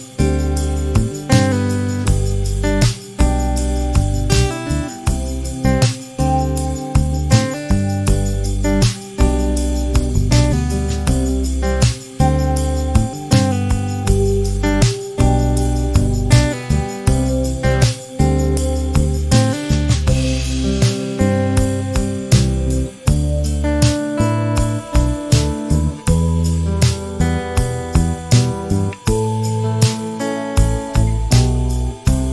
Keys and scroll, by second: 3.7 m, 7.5 space, 9.8 space, 10.0 p, 10.7 5, 10.9 0, 11.3 Return, 12.7 space, 16.7 m, 22.4 space, 27.5 m.